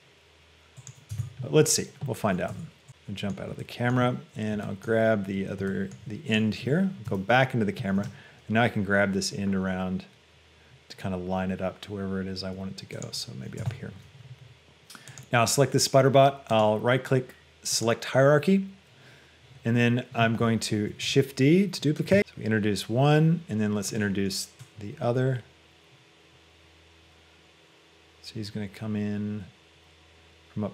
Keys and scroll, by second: 1.3 Tab, 7.2 shift+KP_0, 8.3 g, 13.8 Tab, 21.1 shift+d.